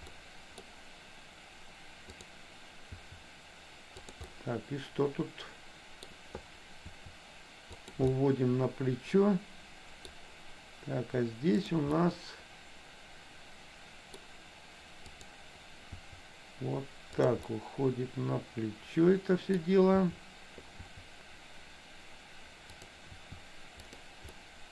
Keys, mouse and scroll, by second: 0.3 middle click, 2.2 click, 3.1 r, 4.2-6.1 middle drag, 7.1 r, 8.1-10.2 middle drag, 11.6 click, 12.1-14.3 middle drag, 15.2 click, 16.0 r, 17.5-19.8 middle drag, 20.0 r, 20.8 r, 23.2 r, 24.5 middle click.